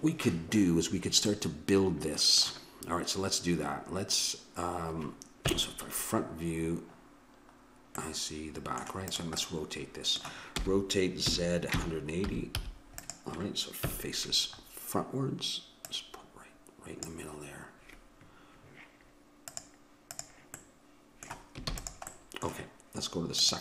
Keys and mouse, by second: 5.5 KP_1, 8.0 middle click, 9.1-10.8 drag, 10.6 r, 13.9 KP_1, 15.8-17.6 drag, 19.5-21.3 drag, 20.7 middle click, 21.7 ctrl+s, 23.4 click.